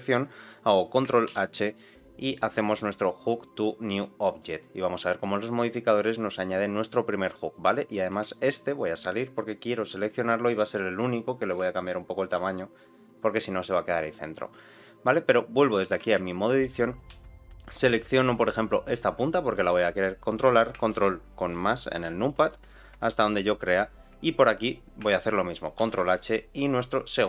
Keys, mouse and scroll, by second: 1.2 ctrl+h, 7.6-8.1 scroll down 1, 8.1 Tab, 9.8 click, 10.9 click, 11.9-13.0 shift+drag, 14.0 click, 15.6-15.9 scroll down 1, 15.9 Tab, 16.2 shift+middle click, 16.6-17.0 scroll up 1, 17.0 1, 17.5 z, 17.8 middle click, 18.2-18.8 scroll up 1, 18.8 click, 19.1 middle click, 20.9 ctrl+KP_Add, 21.5 ctrl+KP_Add, 22.2 ctrl+KP_Add, 22.5 ctrl+KP_Add, 22.8 ctrl+KP_Add, 23.4 ctrl+KP_Add, 25.7 ctrl+h.